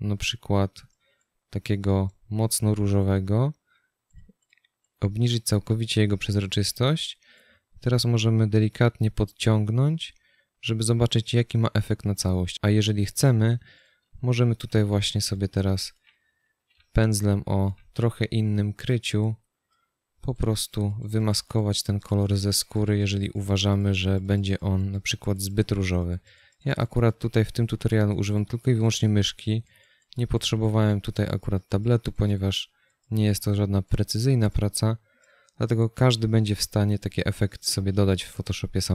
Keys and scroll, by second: 15.1 b, 16.9 3.